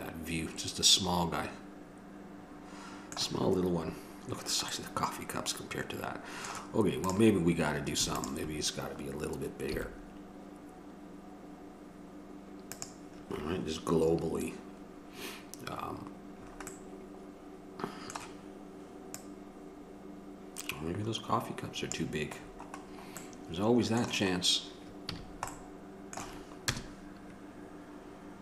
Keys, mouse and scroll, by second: 2.1 middle click, 3.0-4.7 middle drag, 5.0 middle click, 5.6-7.3 middle drag, 7.3-13.0 drag, 16.7-19.7 middle drag, 19.7-22.1 drag, 22.6 middle click, 23.5-24.6 middle drag, 25.3 a, 25.4 middle click, 26.9 KP_0.